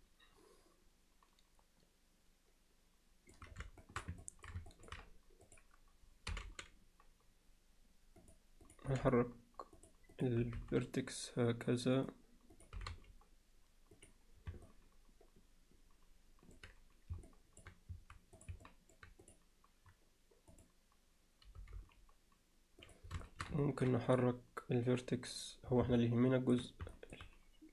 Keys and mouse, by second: 3.8 alt+shift+middle click, 4.2 ctrl+alt+middle click, 4.7 ctrl+alt+middle click, 6.3 g, 8.6 click, 8.9 g, 10.1 click, 10.4 g, 12.5 click, 12.8 g, 14.7-16.6 alt+middle drag, 17.3 alt+middle click, 18.4 click, 18.7 middle click, 19.2 click, 20.5 click, 21.6 g, 23.2 alt+shift+middle click, 23.6 ctrl+alt+middle click, 26.0 alt+middle click, 26.9 alt+middle click.